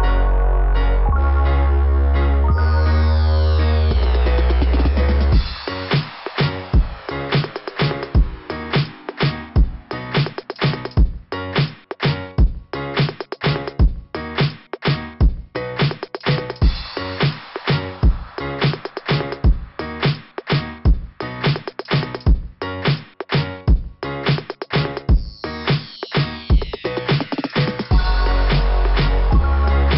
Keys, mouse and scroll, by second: 1.0 scroll down 2, 4.3-4.9 scroll down 3, 5.3-5.7 scroll down 3, 7.2 scroll up 4, 9.6-10.3 scroll up 4, 11.8 click, 13.5 click, 15.4 click, 17.4 typing, 20.0 click, 20.3 click, 20.4 click, 20.6 click, 20.8 click, 21.0 click, 21.1 click, 21.3 click, 21.4 click, 21.6 click, 21.8 click, 22.0 click, 22.1 click, 22.3 click, 22.4 click, 24.1 scroll down 2, 24.4 scroll up 2, 26.7 scroll down 1, 26.7 scroll up 1, 26.8 scroll down 2, 28.8 click, 29.9 click.